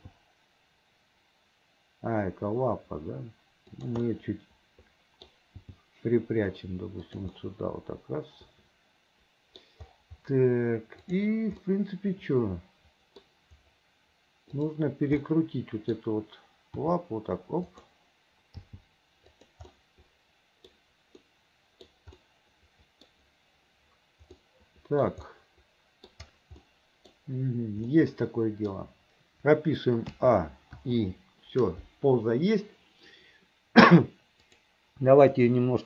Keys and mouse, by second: 0.1 g, 4.2-5.4 middle drag, 5.7 g, 7.5-9.7 middle drag, 11.2 click, 11.8-13.4 middle drag, 15.4 click, 16.9 r, 18.8 g, 19.9 click, 21.4 click, 22.4 middle click, 24.6 middle click, 25.5 middle click, 26.7 middle click, 28.0 middle click, 28.1 click, 30.2 a, 30.9 i, 34.6-35.8 drag.